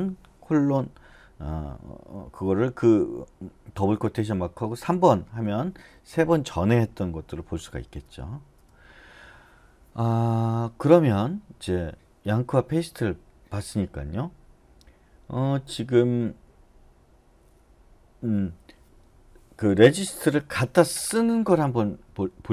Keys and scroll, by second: 7.9 Return, 8.6 Return.